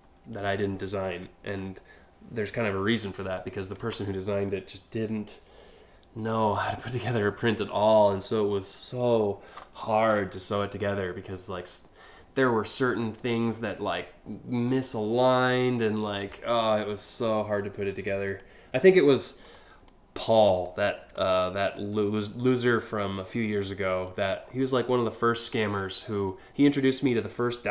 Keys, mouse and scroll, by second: 1.1 click, 10.8 scroll down 1, 11.1 scroll up 1, 17.2 scroll down 1, 17.9 click, 19.1 click, 19.5 click, 20.8 ctrl+click, 21.4-23.7 drag, 24.1 scroll down 2, 26.7 alt+scroll down 1.